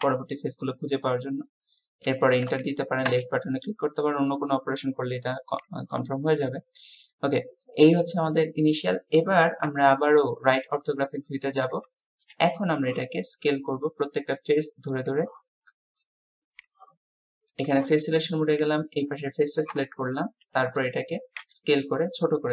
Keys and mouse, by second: 3.1 Return, 6.6-9.2 drag, 9.7 KP_3, 12.1 shift+click, 12.6 click, 15.8 click, 18.0 click, 18.6-19.8 drag, 19.8 KP_3, 21.4 s.